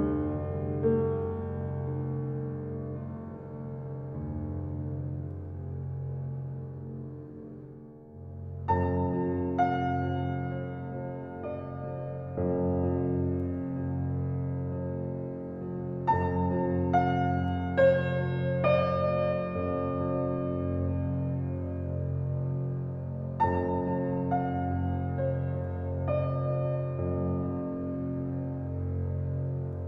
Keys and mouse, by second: 1.3-2.5 alt+drag, 2.8-3.3 typing, 3.3 Tab, 4.8 alt+click, 7.2 click, 7.4 click, 8.3-9.7 shift+drag, 13.5 alt+click, 14.4 g, 14.8 x, 16.1 Escape, 17.4 click, 18.5 g, 18.9 x, 20.7 click, 21.2-22.8 alt+drag, 23.4 click, 23.6 shift+click, 23.6 typing, 23.9 middle click, 24.1 click, 24.5 middle click, 24.6 alt+click, 24.9 middle click, 25.1 alt+click, 25.3-26.2 typing, 27.8 alt+click.